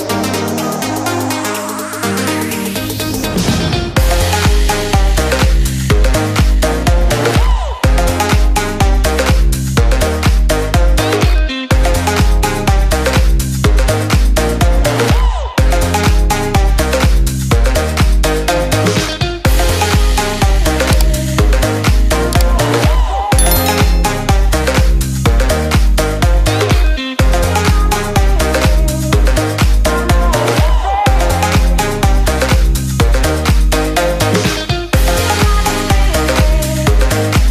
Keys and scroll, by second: 5.7 alt+Left, 9.3 ctrl+space, 10.5 ctrl+x, 11.2 ctrl+v, 12.6 ctrl+x, 13.0 ctrl+v, 13.8 ctrl+space, 18.1 ctrl+c, 18.9 ctrl+v, 22.5 ctrl+shift+o, 25.1 ctrl+g, 25.9 ctrl+space, 27.4 ctrl+alt+2, 27.6 ctrl+space, 31.0 ctrl+shift+i, 33.4 ctrl+space, 34.4 ctrl+space, 36.2 ctrl+space.